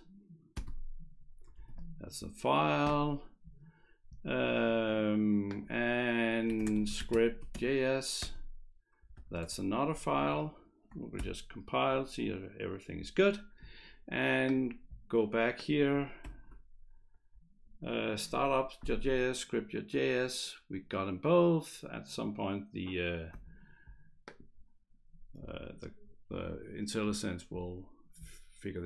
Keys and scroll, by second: 0.8 typing, 1.6 ctrl+s, 6.3-8.0 typing, 8.2 Return, 9.0 /, 9.2 /, 9.4 Return, 10.2 ctrl+s, 11.1 ctrl+shift+b, 16.2 ctrl+shift+b.